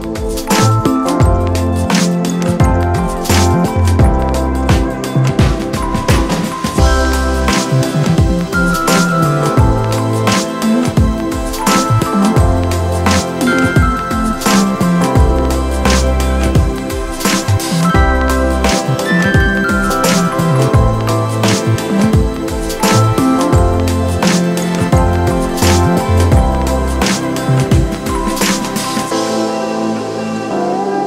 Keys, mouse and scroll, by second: 11.9 alt+shift+click, 19.7 ctrl+d, 22.5 ctrl+d, 24.2 scroll down 1, 24.5 scroll up 1.